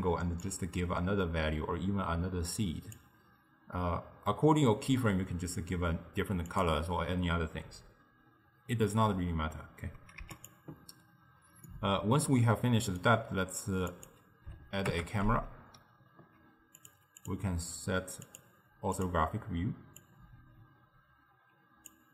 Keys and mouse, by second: 0.5-3.5 drag, 6.5 click, 10.3 x, 11.7-14.0 middle drag, 14.0 click, 15.0 KP_0, 16.8 click, 17.2 click, 18.3-22.1 drag.